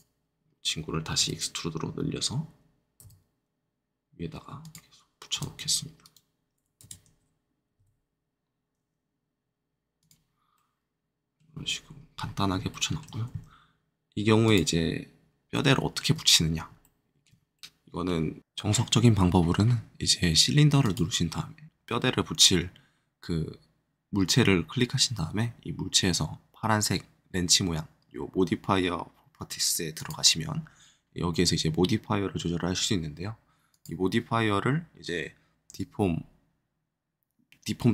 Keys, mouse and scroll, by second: 0.4-1.1 scroll down 2, 1.1 e, 3.0 z, 4.6 click, 5.3 r, 5.9 right click, 6.7 e, 7.7 z, 9.9 click, 10.5 middle click, 11.7 scroll up 2, 12.1-12.5 scroll down 2, 12.6 shift+middle click, 14.4 shift+click, 15.5 shift+middle click, 16.6 shift+middle click, 20.8-22.9 drag, 29.9-33.6 drag, 33.7-37.7 drag.